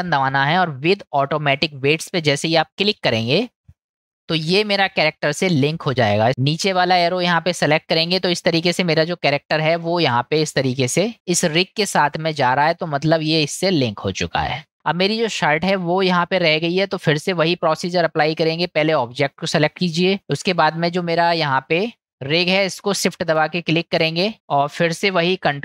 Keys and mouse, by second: 6.3 ctrl+z, 6.6 click, 7.9 click, 11.0 ctrl+z, 13.8-14.6 middle drag, 18.8 click, 19.4-20.1 middle drag, 24.3 middle click.